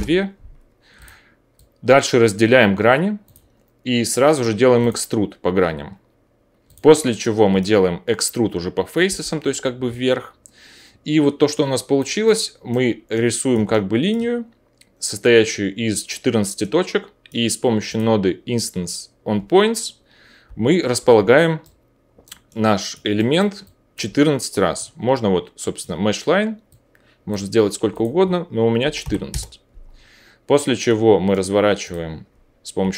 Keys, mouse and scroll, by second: 1.0 click, 4.9-6.6 drag, 6.8-9.8 drag, 9.0 o, 10.0 alt+click, 10.0-17.9 alt+middle drag, 10.0 alt+right click, 12.8 click, 12.8 right click, 13.7 alt+click, 13.7 alt+right click, 17.9-24.0 drag, 20.4 o, 23.6-31.9 alt+middle drag, 23.6 alt+right click, 31.9-32.9 drag.